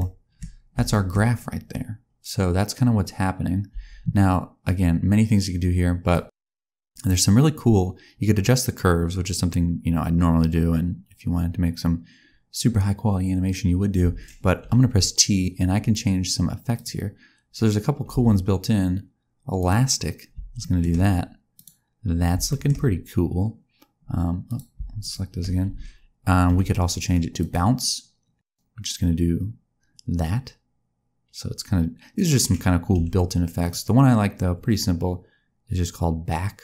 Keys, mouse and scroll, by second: 0.4-1.8 scroll down 5, 0.8 shift+middle click, 3.6 space, 4.5 click, 6.2 space, 13.9 space, 14.5 t, 18.0 space, 19.4 click, 20.5 shift+middle click, 21.4 click, 22.4 shift+middle click, 24.4 click, 24.9 shift+click, 25.6 a, 26.4 t, 32.9 t.